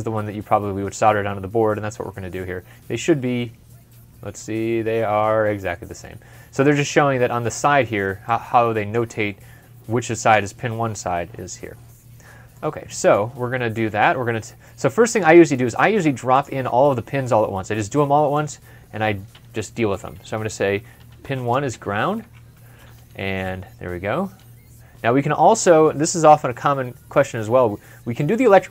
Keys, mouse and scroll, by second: 1.8 ctrl+scroll down 1, 2.6 ctrl+scroll up 1, 5.3 ctrl+scroll up 1, 5.7 ctrl+scroll down 1, 6.0 ctrl+scroll up 1, 12.1 scroll down 1, 12.4 middle click, 20.6-22.1 typing.